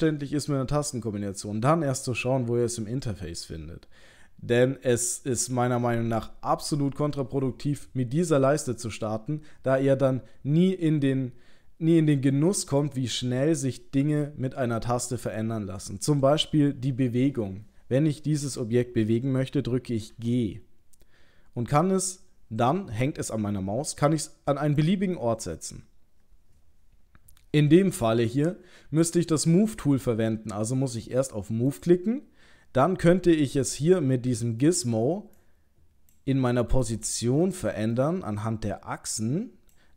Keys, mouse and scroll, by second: 20.1 g, 31.7 click, 34.4 middle click, 35.4 click, 36.8 click, 38.0 middle click, 39.2 click.